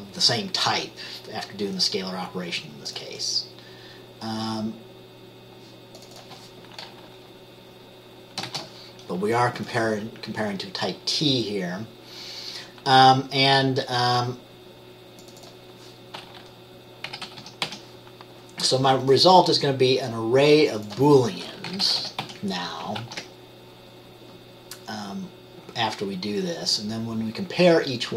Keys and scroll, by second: 8.6 t, 17.2-17.8 typing, 21.8-22.4 typing, 23.2 ctrl+s.